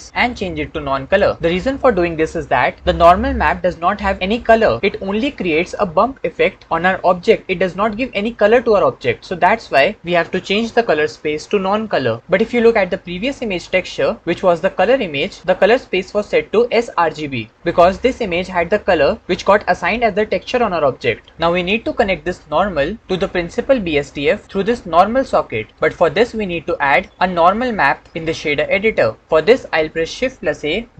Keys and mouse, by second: 12.2-14.1 middle drag, 21.5-23.4 middle drag, 27.4 shift+click, 30.3 shift+a.